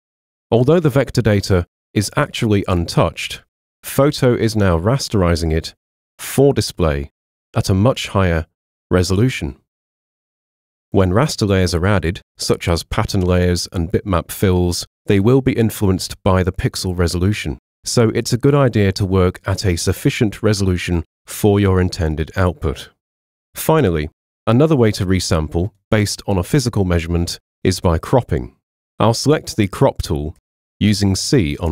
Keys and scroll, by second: 30.4 c.